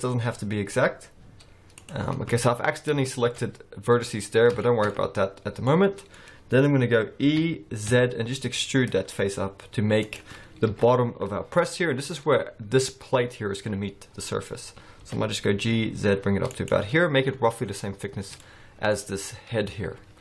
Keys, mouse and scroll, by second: 2.1-2.7 scroll down 6, 2.3 middle click, 2.7-3.6 scroll up 7, 3.1 shift+middle click, 4.4 scroll down 2, 4.6 shift+middle click, 4.9 scroll up 2, 5.7 middle click, 7.2 e, 10.7 KP_1, 12.5-13.5 scroll up 1, 15.0 g, 17.8-18.4 scroll down 3, 18.4 middle click.